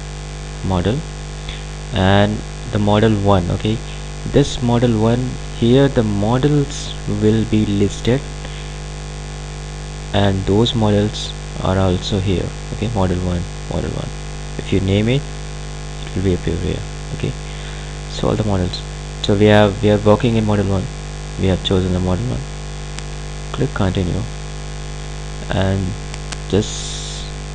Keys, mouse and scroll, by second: 4.3 click, 7.6-11.7 drag, 17.7-20.9 drag, 23.5-27.5 drag.